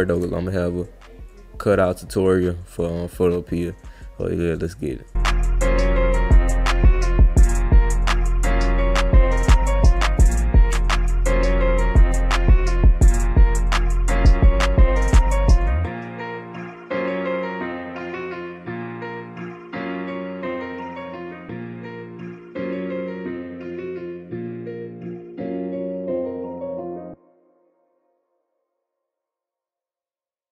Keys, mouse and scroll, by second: 0.1 alt+click, 1.3-4.6 drag, 5.2 drag, 5.5 click, 6.0 drag, 6.4 drag, 6.8 click, 7.1 click, 7.4-7.8 drag, 8.0-8.4 drag, 8.6 click, 8.9 click, 9.0 click, 9.1 click, 9.6-10.6 drag, 10.8 click, 12.4 click, 12.6 click, 12.8 click, 13.0 click, 13.2 click, 13.4 click, 13.5 click, 13.7 click, 13.9 click, 14.2 click, 14.3 click, 14.6 click, 14.8 click, 15.0 click, 15.7 click, 15.8 ctrl+z, 15.9 click, 16.1 click, 16.3 click, 16.6 ctrl+z, 16.7 click, 17.0 click, 17.2 ctrl+z, 17.2-17.7 drag, 17.9 click, 18.3 click, 18.7 alt+click, 18.8 click, 19.0 click, 19.3 click, 19.6 click, 19.8 ctrl+z, 19.8-20.3 drag, 20.6 click, 21.4 alt+scroll up 2, 21.6 alt+drag, 22.0 click, 22.3 click, 22.5 click, 22.7 click, 23.0 click, 23.1 click, 23.3 click, 24.0 click, 24.1 click, 24.4 click, 24.5 click, 24.7 click, 24.8 click, 24.9 ctrl+z, 25.0 click, 25.1 click, 25.3 click, 25.4 click, 25.6 click, 25.7 click, 25.9 click, 26.1 click, 26.6 click, 26.8 drag, 27.5 drag, 27.9 alt+click, 28.1 click, 28.4 alt+click, 28.6 click, 28.7 ctrl+z, 28.8 click, 29.0 click, 29.1 click, 29.2 click, 29.6 click, 29.9 click, 30.1 click.